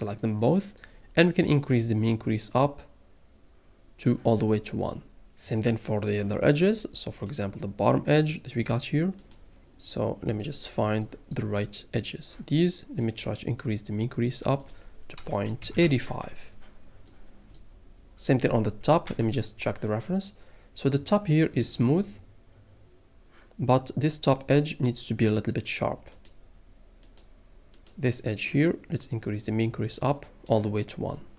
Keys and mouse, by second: 2.2-4.1 drag, 5.8 middle click, 5.8 click, 7.1 click, 11.1 click, 12.0 shift+click, 13.0-14.5 drag, 14.6-16.1 drag, 17.1 middle click, 19.0 KP_1, 26.1 click, 27.1 click, 27.7 click, 29.0-30.4 drag.